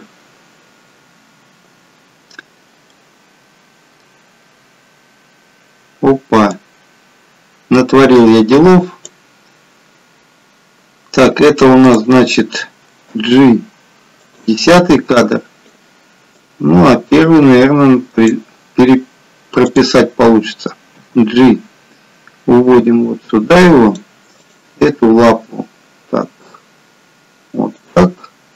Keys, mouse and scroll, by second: 2.9 middle click, 6.8 click, 11.9 click, 13.3 g, 15.3 click, 16.7 click, 19.7 click, 21.3 g, 24.4 click, 24.9 g.